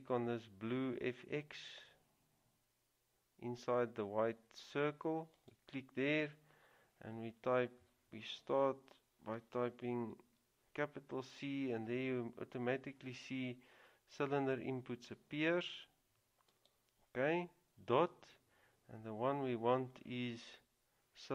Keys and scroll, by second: 10.3 c.